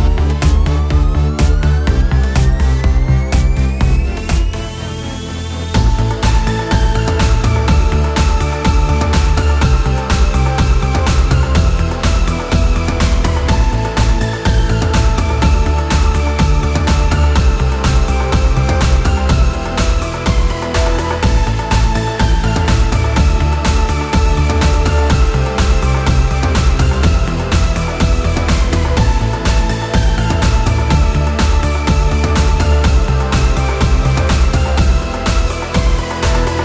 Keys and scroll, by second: 2.2 ctrl+d, 9.0 ctrl+z, 9.6 ctrl+alt+z, 16.0 ctrl+d, 29.2 ctrl+alt+shift+e.